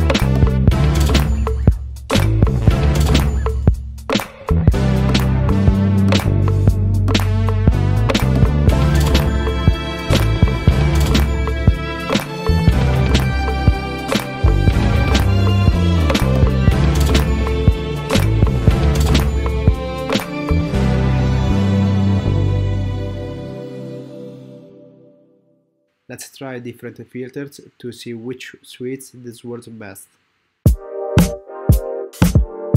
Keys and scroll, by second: 2.7 Down, 3.8 Down, 4.5 Down, 5.0 Return, 5.9 Down, 6.0 Return, 6.3 Down, 6.4 Return, 8.1 Return, 10.7 super+z, 11.4 super+z, 12.1 alt+super+z, 20.7 super+z, 21.3 alt+super+z, 30.4 super+z, 31.8 super+z.